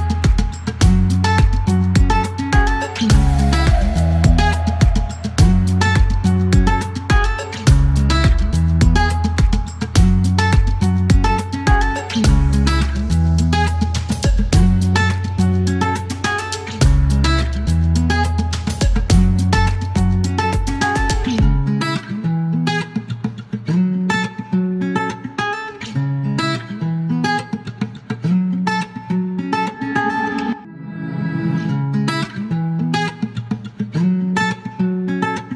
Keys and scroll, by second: 5.4 space, 6.4 e, 8.3 typing, 8.7 Delete, 10.8 space, 11.2 KP_0, 13.8-14.5 typing, 17.3-17.8 typing, 19.7-20.5 typing, 21.2 F1, 22.7-23.7 typing, 25.3 ctrl+z, 26.6-28.2 typing, 30.4 e, 31.7-32.3 typing, 33.7 space, 34.9-35.5 typing.